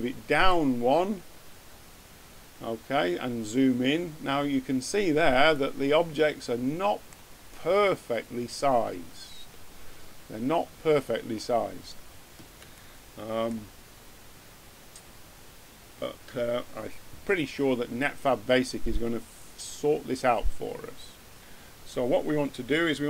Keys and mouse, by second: 1.4 middle click, 2.7 middle click, 5.4-10.7 middle drag.